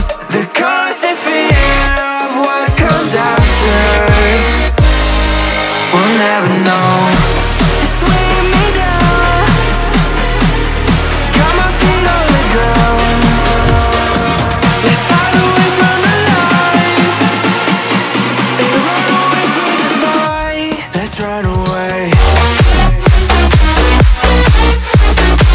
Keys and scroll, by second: 0.0-0.6 typing, 3.2 shift+Return, 8.2 Down, 11.6 Caps_Lock, 12.2-15.9 typing, 19.7 Return.